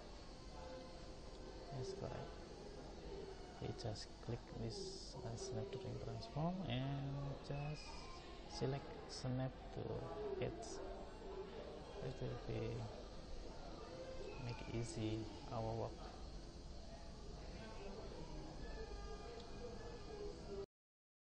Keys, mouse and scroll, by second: 0.6-2.1 middle drag, 11.5 middle click, 11.9-12.8 middle drag, 12.9 middle drag, 13.1 middle click, 13.3-14.2 middle drag, 14.6-15.3 middle drag, 15.5-16.7 middle drag, 16.7-17.1 middle drag.